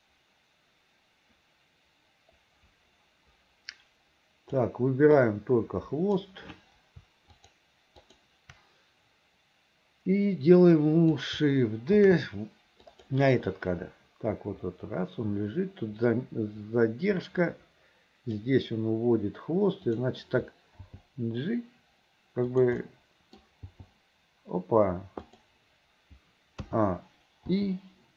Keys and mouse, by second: 5.3-6.4 drag, 7.5 shift+click, 8.2 shift+click, 10.9 click, 12.1 shift+d, 13.7-18.5 drag, 20.9 g, 22.9 click, 25.4 g, 26.7 a, 27.6 i.